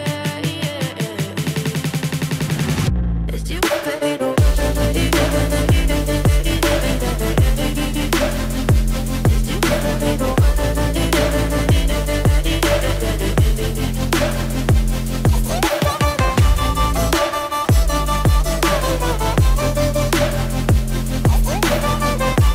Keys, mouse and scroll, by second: 9.1 right click, 10.7 shift+right click, 13.2 typing.